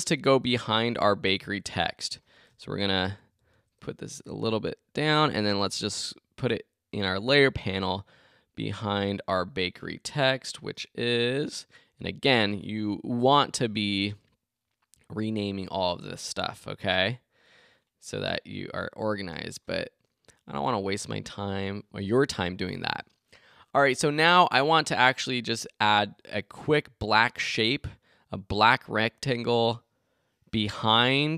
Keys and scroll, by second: 2.7 shift+Down, 3.2 shift+Up.